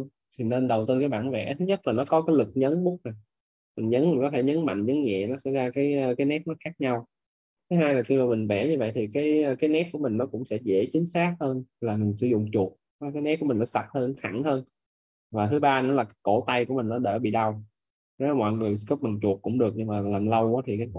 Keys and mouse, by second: 3.2 click, 8.0 click, 13.0 right click, 13.9 click.